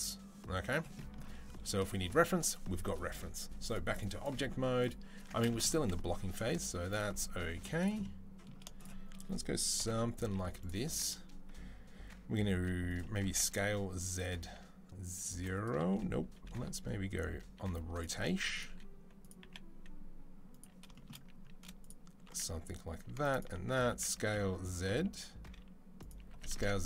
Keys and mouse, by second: 4.7-6.1 middle drag, 5.0 Tab, 6.1 click, 6.2-8.6 middle drag, 7.3 z, 8.6 click, 8.7-21.6 shift+middle drag, 9.6 KP_3, 10.1 z, 12.3 r, 13.1 s, 16.3 r, 17.9 g, 18.5 r, 19.2 g, 21.6 shift+click, 21.7-23.1 shift+middle drag, 23.1 shift+click, 23.2-26.8 shift+middle drag, 23.7 s, 26.1 s.